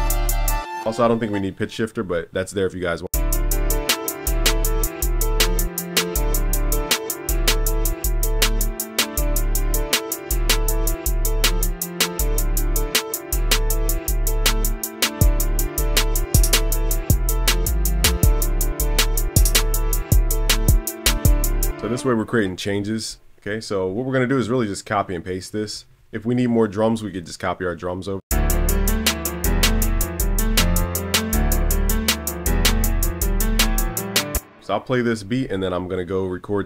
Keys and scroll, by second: 9.6 super+s, 16.5 super+s, 24.4 super+a, 25.7 super+b, 32.4 super+s.